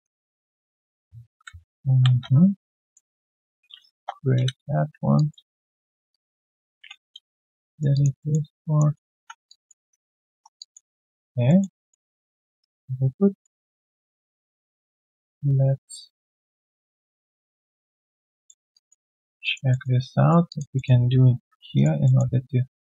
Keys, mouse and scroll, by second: 0.2 alt+middle click, 0.5 alt+click, 2.0 ctrl+shift+x, 3.9 Return, 5.1 alt+click, 5.3 q, 5.5 right click, 6.8 ctrl+Delete, 7.7 alt+right click, 7.9 alt+click, 8.2 alt+middle click, 8.4 alt+click, 8.9 alt+middle click, 9.1 3, 9.4 alt+click, 9.9 right click, 10.3 right click, 10.5 alt+click, 10.9 alt+middle click, 11.2 alt+click, 11.4 alt+middle click, 11.7 alt+click, 12.0 alt+middle click, 12.4 right click, 12.5 typing, 18.2 typing, 18.4 alt+middle click, 18.7 alt+click, 19.0 alt+middle click, 19.4 alt+click, 19.7 alt+middle click, 20.0 right click, 20.4 alt+click, 20.7 alt+middle click, 21.4 ctrl+shift+x, 21.7 alt+right click, 22.0 alt+middle click.